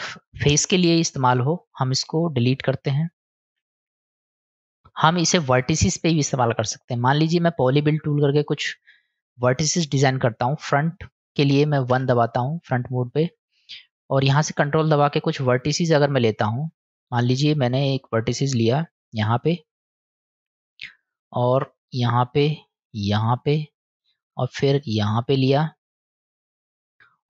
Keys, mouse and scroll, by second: 3.6 Delete, 7.7 click, 9.4-10.0 middle drag, 11.9 KP_1, 19.1 ctrl+click, 21.8 ctrl+click, 23.2 ctrl+click, 25.4 ctrl+click.